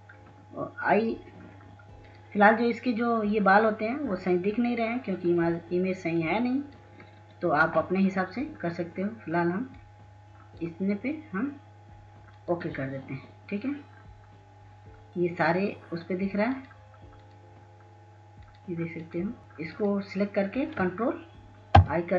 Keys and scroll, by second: 20.3 ctrl+i, 21.6 ctrl+space.